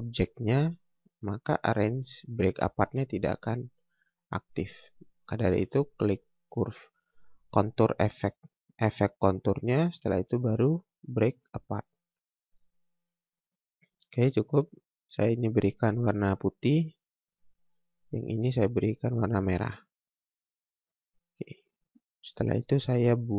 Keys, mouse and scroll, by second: 1.0 click, 4.5 click, 10.2 click, 12.4 scroll down 1, 12.8 scroll up 1, 14.7 click, 15.3 scroll up 1, 16.9 click, 20.2 scroll down 1, 21.1 scroll up 1, 22.2 scroll down 1, 22.4 scroll up 1.